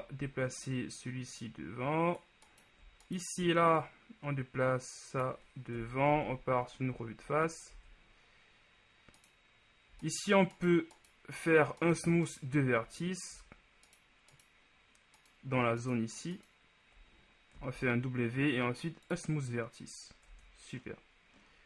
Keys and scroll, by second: 6.0 KP_1, 6.3 Tab, 7.8 shift+Tab, 17.7 shift+w, 20.5 Tab.